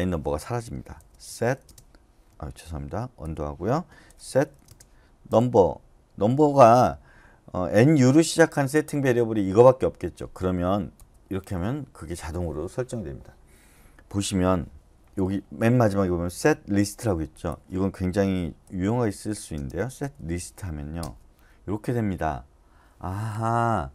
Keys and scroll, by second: 1.0-1.6 typing, 2.3 Escape, 4.3-5.3 typing, 7.6-8.3 typing, 10.9 Return, 18.6-20.3 typing, 21.0 Return.